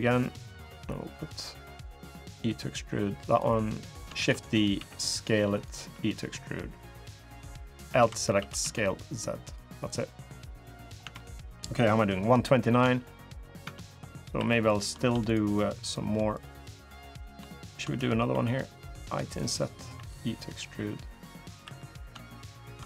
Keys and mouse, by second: 0.0 click, 1.5 click, 2.0 e, 3.9 shift+d, 4.5 s, 5.6 e, 7.3 click, 7.7 l, 8.1 s, 9.8 middle click, 10.8 Tab, 12.0 click, 12.6 shift+click, 13.0 shift+middle click, 13.4 Tab, 13.8 click, 14.1 3, 15.0 click, 15.6 click, 17.0 click, 18.1 i, 19.7 e, 21.4 3, 22.1 shift+click.